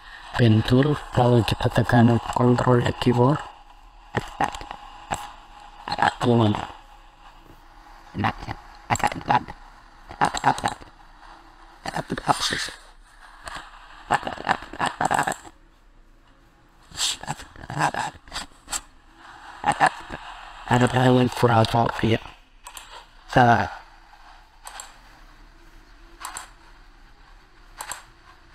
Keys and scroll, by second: 19.7 ctrl+z, 24.5 ctrl+z.